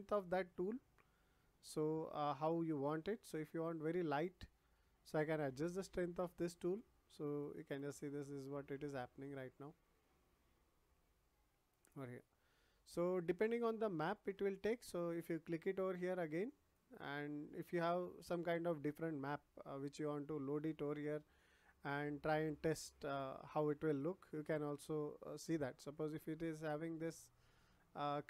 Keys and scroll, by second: 12.1 ctrl+z.